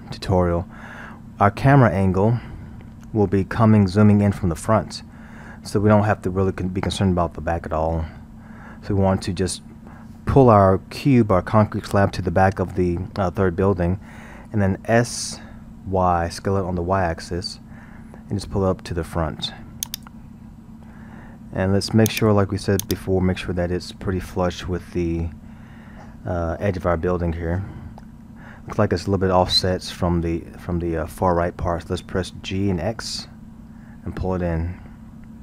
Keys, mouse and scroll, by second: 2.7 KP_1, 3.1-7.0 scroll, 8.7 KP_7, 10.3-12.3 scroll, 15.3 s, 20.4-22.1 scroll, 22.1 click, 22.8 click, 23.4-26.6 scroll, 32.5 g.